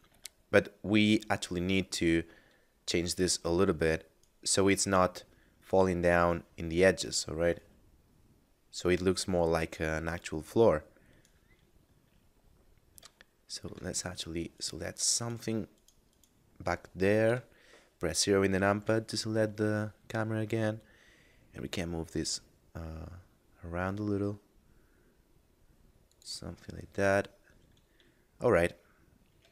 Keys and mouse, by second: 0.1 Tab, 2.0 right click, 7.5 right click, 10.1 right click, 12.3 middle click, 13.3 shift+middle click, 14.5 right click, 17.1 KP_0, 18.8 g, 26.1 click, 26.7 middle click, 29.4 Tab.